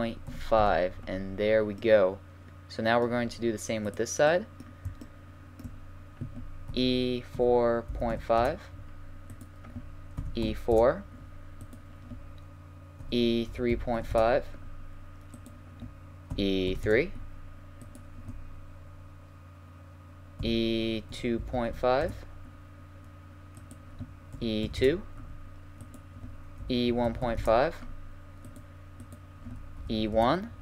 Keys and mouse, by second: 1.8-5.2 middle drag, 5.2 right click, 6.7 e, 9.3 right click, 10.2 e, 11.6 right click, 13.0 e, 15.4 click, 16.4 e, 17.8 click, 20.4 e, 24.3 e, 26.6 e, 27.7-28.4 middle drag, 29.8 e.